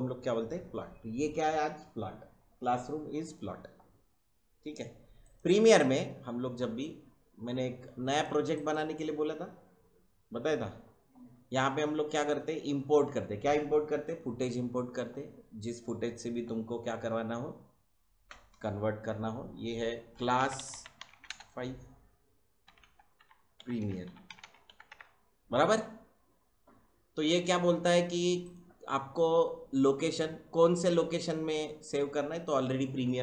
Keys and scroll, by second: 20.1-21.4 typing, 22.6-25.3 typing.